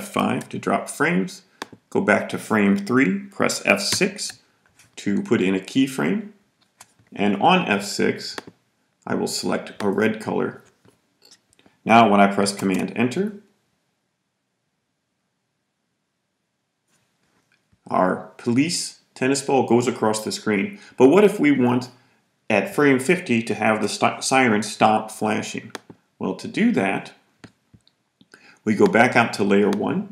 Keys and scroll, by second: 0.0 F5, 3.8 F6, 12.5 super+Return.